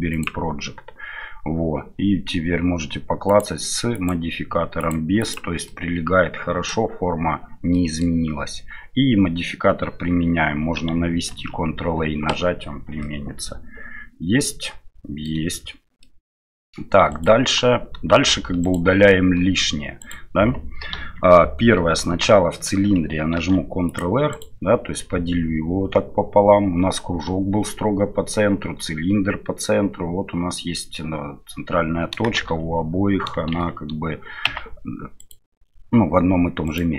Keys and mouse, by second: 3.3 click, 3.9 click, 4.8 click, 5.6-6.7 middle drag, 7.7 middle click, 11.3 ctrl+a, 13.0-15.2 middle drag, 16.0-16.6 middle drag, 17.1-18.1 right drag, 18.6 shift+right click, 20.0-20.9 right drag, 20.9 KP_1, 22.1 Tab, 23.3 ctrl+r, 32.4 shift+z, 33.5 shift+z, 34.5 Tab, 36.7 right click.